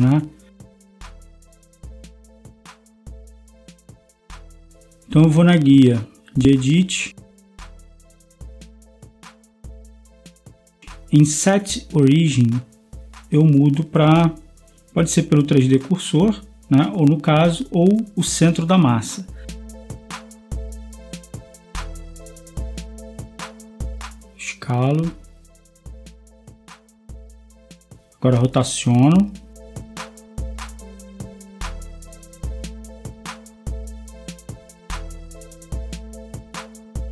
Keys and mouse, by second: 25.0 s, 27.8 r, 33.3 g.